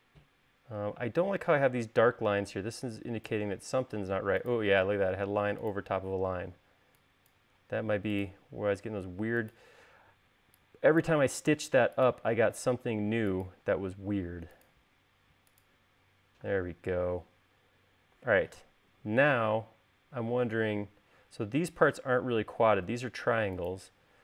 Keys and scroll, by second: 3.1 e, 4.5 l, 7.0 e, 8.3 l, 10.8 e, 12.1 l, 17.2 space.